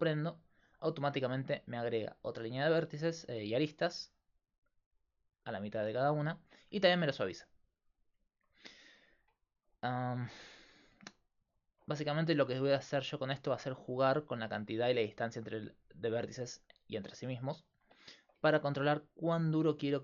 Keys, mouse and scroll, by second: 8.6 Tab, 13.8 ctrl+r, 18.5 ctrl+r.